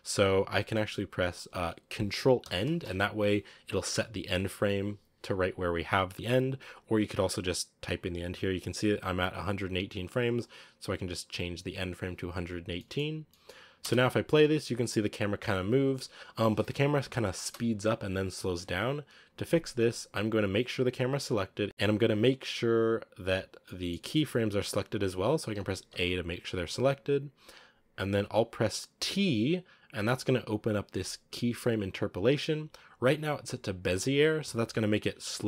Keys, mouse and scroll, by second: 2.3 ctrl+End, 13.7 space, 14.3 scroll up 2, 17.2 space.